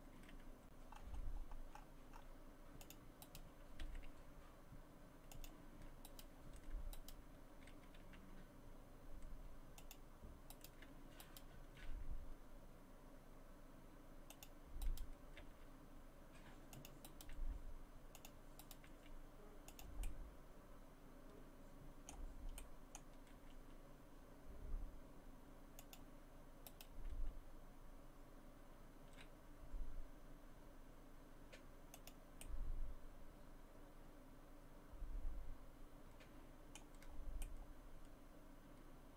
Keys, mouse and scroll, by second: 0.3 g, 3.2 right click, 3.8 g, 6.1 right click, 6.9 shift+right click, 8.2 g, 10.5 right click, 11.7 shift+right click, 11.9 g, 14.8 right click, 15.4 g, 17.1 right click, 17.4 g, 18.6 right click, 18.9 g, 20.0 middle click, 22.6 middle click, 23.3 g, 26.7 right click, 27.1 g, 32.4 middle click, 37.1 scroll down 2, 37.4 middle click.